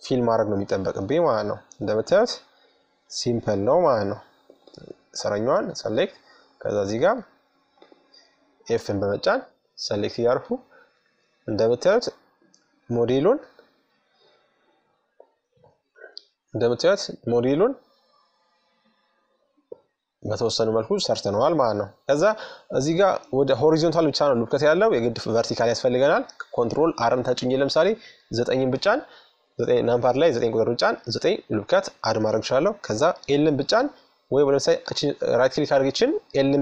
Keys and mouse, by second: 0.5-2.1 middle drag, 2.1-4.9 right drag, 4.1 f, 5.4-8.0 right drag, 7.3 f, 8.5-10.2 middle drag, 10.7 middle click, 13.3 click, 14.1-15.1 drag, 15.1-17.7 middle drag, 19.8 Tab, 21.3-23.2 middle drag, 25.3 ctrl+r, 31.9 l, 33.4-35.2 right drag, 35.1 l, 35.9 l.